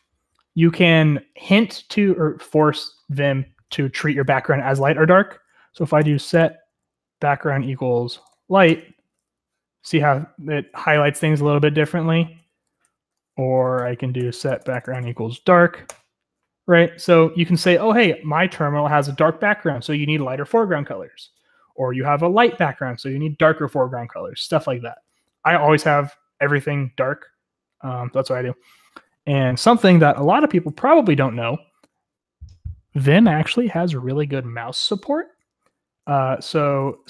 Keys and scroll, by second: 1.6 j, 5.2-8.9 typing, 6.5 Tab, 12.1-15.7 typing.